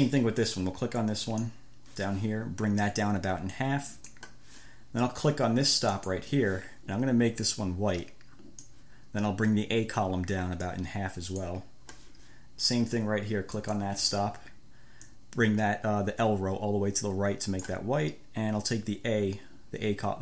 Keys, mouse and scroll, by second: 1.6 click, 3.8 click, 6.2 click, 7.8 click, 8.4-9.2 scroll, 11.0-13.0 drag, 13.8 click, 15.3-18.2 drag.